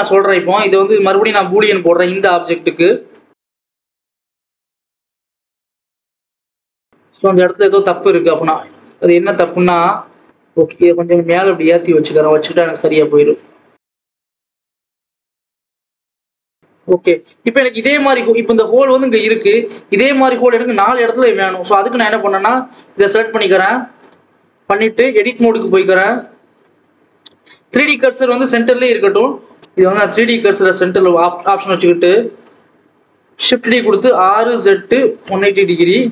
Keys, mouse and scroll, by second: 0.1 click, 2.1-3.5 drag, 3.8 click, 4.4-5.1 scroll up 3, 5.1 click, 5.7 click, 6.3 click, 8.3 click, 8.6 Tab, 9.0-10.3 scroll up 1, 10.3 g, 12.9 click, 13.6 scroll up 1, 13.7 Tab, 13.9 click, 14.2 click, 14.3 scroll down 1, 14.6 g, 15.8 click, 16.8 ctrl+s, 17.0-17.5 scroll down 4, 18.8 click, 21.3 click, 21.7-22.1 scroll up 1, 22.1 click, 23.9-26.4 drag, 26.4-26.8 scroll down 1, 26.8 KP_7, 27.3-27.6 scroll down 1, 29.1 shift+d, 29.6 ctrl+z, 29.8-32.0 drag, 32.0 g, 33.2 shift+d, 34.0 r.